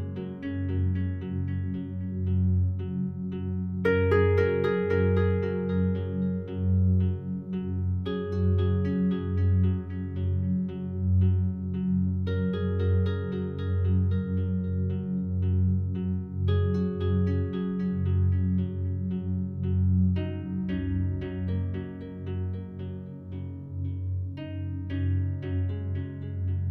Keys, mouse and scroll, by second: 1.0 click, 2.1 click, 2.7 click, 4.1 click, 6.4 click, 7.5 click, 7.8 click, 8.4-10.3 drag, 10.3 click, 11.1-12.8 drag, 13.2 click, 14.0 click, 14.4 click, 15.3 click, 16.0-17.4 drag, 17.5 click, 17.8 click, 18.5-19.6 drag, 20.4 Delete, 21.2 click, 22.4-23.9 drag, 24.1 click, 24.3 click.